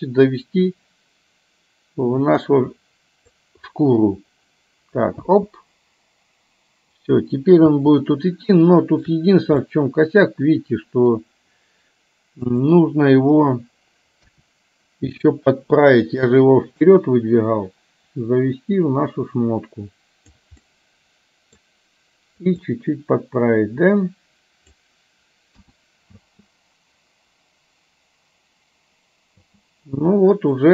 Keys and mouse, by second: 5.3 space, 7.8 space, 8.7 shift+middle click, 9.7-11.2 middle drag, 12.6 click, 14.3 KP_1, 15.4 middle click, 16.9-20.4 drag, 20.7-21.7 middle drag, 22.8-24.9 drag, 25.6 KP_1, 26.3 space, 29.6 space.